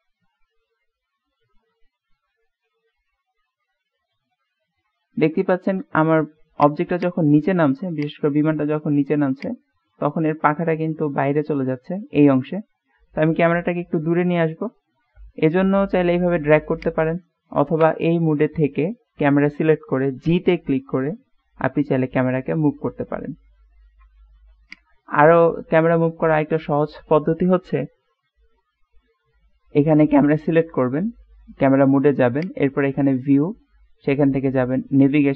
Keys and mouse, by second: 6.8 click, 7.1 click, 8.1 click, 9.6-11.9 drag, 14.6 middle click, 15.4-15.8 middle drag, 16.8 right click, 17.8 KP_0, 20.3 g, 32.5-35.3 drag.